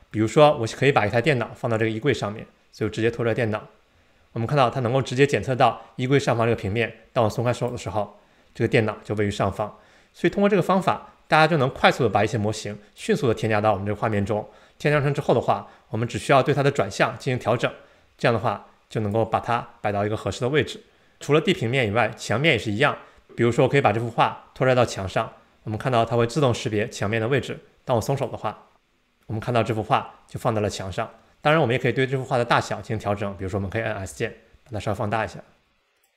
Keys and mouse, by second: 0.3-1.3 middle drag, 2.9-8.0 drag, 11.4-13.2 drag, 17.2-19.5 drag, 24.7-28.5 drag, 34.1 s.